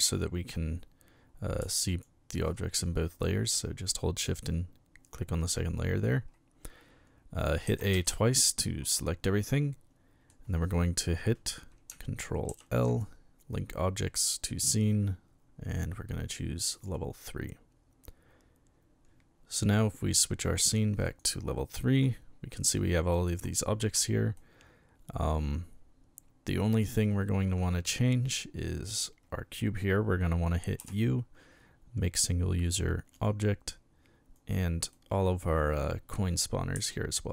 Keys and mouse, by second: 1.9 shift+click, 7.7 a, 7.9 a, 9.3-10.3 middle drag, 12.5 ctrl+j, 16.7 click, 19.6 click, 21.0 click, 22.6 right click, 24.4-27.0 middle drag, 27.8-28.4 middle drag, 30.8 u, 33.2 click, 34.4 right click, 34.9-36.4 middle drag, 36.7 u.